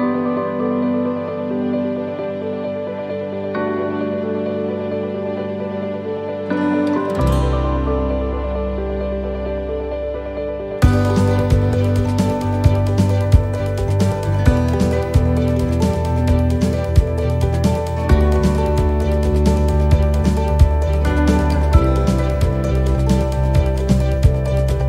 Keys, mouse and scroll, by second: 1.1 c, 2.5 middle click, 5.8 middle click, 7.1 x, 9.1 middle click, 10.8 shift+middle click, 13.8 middle click, 14.9 right click, 15.6 right click, 16.1 x, 17.4 middle click, 18.0 shift+middle click, 18.7 middle click, 19.2-19.9 scroll down 4, 19.9 middle click, 20.3 shift+middle click, 20.9 scroll up 3, 21.4 middle click, 22.2 shift+middle click, 22.6 scroll down 3, 23.1 middle click, 23.1 scroll up 1, 24.5 click.